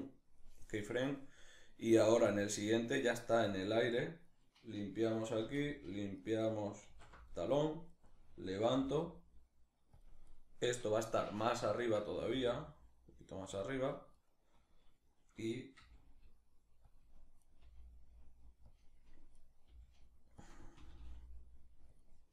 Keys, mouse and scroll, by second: 3.1 right click, 3.9 right click, 5.0 alt+r, 5.8 right click, 6.5 alt+r, 7.6 right click, 8.4 g, 9.6 click, 9.9-10.9 right drag, 10.9-13.2 shift+middle drag, 11.9 g, 13.2 click, 13.8 right click, 15.4 g, 16.6 click, 17.0 right click, 17.2 g, 18.4 click, 19.0 right click, 19.3 g, 20.1 click, 20.4 r, 21.6 click.